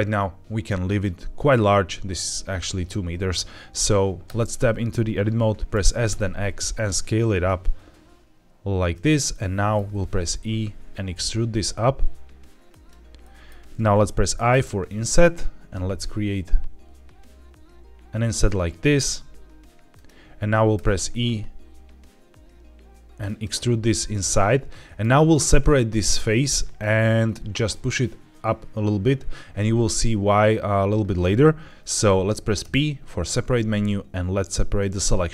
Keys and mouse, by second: 4.2 Tab, 5.7 s, 6.0 x, 8.8 click, 9.2 middle click, 10.1 e, 12.6 click, 13.1 middle click, 14.2 middle click, 19.8 click, 20.7 e, 23.1 click, 24.1 middle click, 32.5 p.